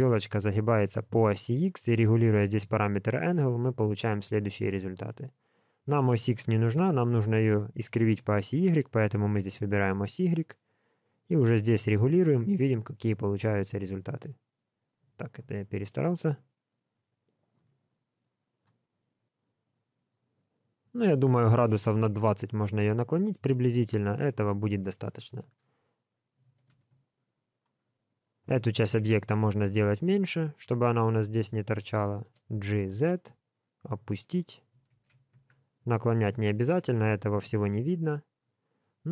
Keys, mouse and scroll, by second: 1.5 click, 6.6 KP_1, 8.5 click, 19.3 click, 24.8 scroll up 3, 25.4 alt+z, 27.4 click, 28.8 Tab, 30.2 alt+z, 30.6 alt+click, 32.2 g, 34.9 alt+a, 35.3 Tab, 36.3 alt+a, 36.9 alt+z, 38.4-38.8 scroll down 2, 38.8 middle click.